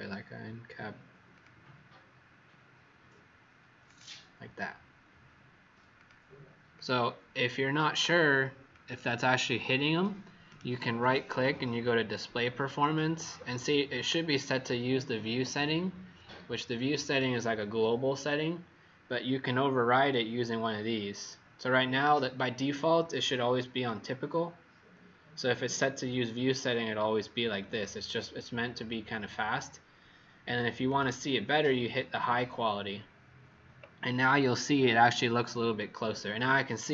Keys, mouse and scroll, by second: 10.4 right click, 30.8 click.